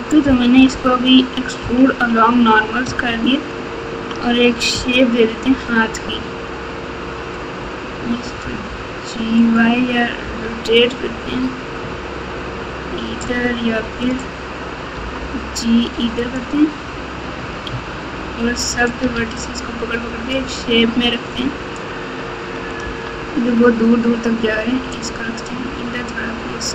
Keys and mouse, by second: 0.2 KP_8, 0.5 KP_8, 0.7 KP_8, 1.6 KP_6, 3.0-3.9 ctrl+KP_6, 4.1 ctrl+KP_6, 4.7 KP_7, 8.4 g, 10.2 r, 14.9 g, 17.7 1, 19.1 alt+z, 19.3 click, 20.9 click, 22.8 g, 25.6 s.